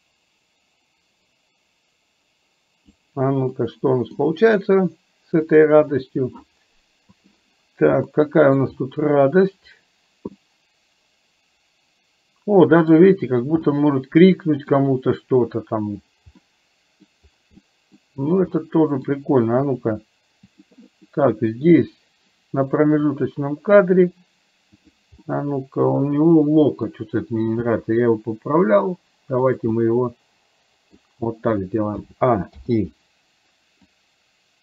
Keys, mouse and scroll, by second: 3.6 middle click, 5.6 click, 7.2 click, 8.1 middle click, 10.5-13.0 middle drag, 13.8 middle click, 16.5 middle click, 17.6 middle click, 18.6 middle click, 20.5 click, 21.1 middle click, 23.2 click, 25.3-27.0 middle drag, 27.6 g, 29.7 scroll up 1, 30.0-31.0 middle drag, 32.1 a, 32.6 i, 34.0-34.6 drag.